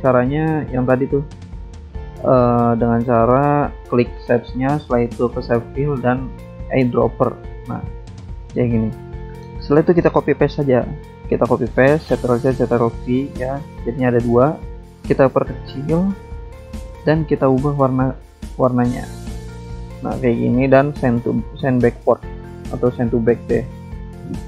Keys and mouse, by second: 5.6 click, 6.5 click, 8.0 click, 9.1 click, 10.3 click, 11.1 click, 12.5 click, 13.7 click, 15.0 ctrl+c, 15.6 ctrl+c, 15.8 ctrl+v, 16.3 click, 18.5 shift+click, 20.9 click, 22.2 click, 23.2 click.